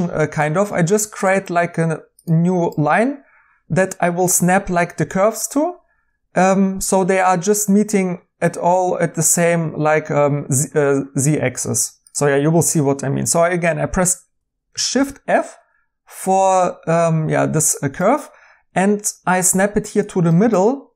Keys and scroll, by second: 14.9 f.